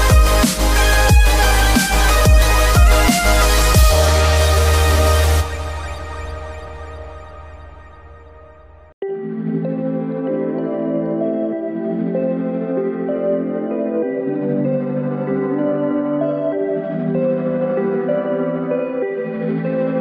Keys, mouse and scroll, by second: 0.5 click, 0.8 alt+click, 1.8-3.5 drag, 4.1 click, 4.6 alt+click, 5.5-7.1 drag, 8.0 alt+click, 8.9-11.2 drag, 12.3 click, 12.7 alt+click, 13.7 click, 14.9 middle click, 16.8 click, 17.2 alt+click, 18.2 s, 19.2 click.